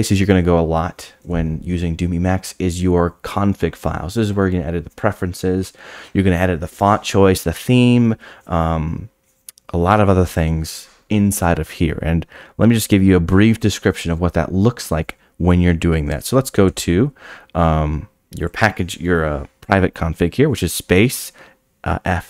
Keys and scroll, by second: 16.4 space.